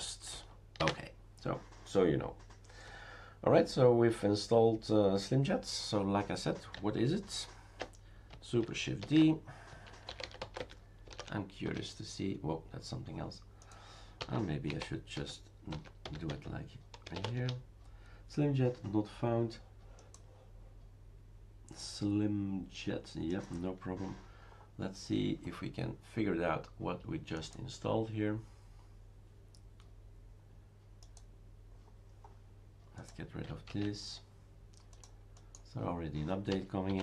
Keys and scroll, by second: 0.8 ctrl+c, 9.1 shift+super+d, 9.4-11.8 typing, 14.0-18.8 typing, 16.3 Tab, 33.7 shift+super+q, 36.3-37.0 typing.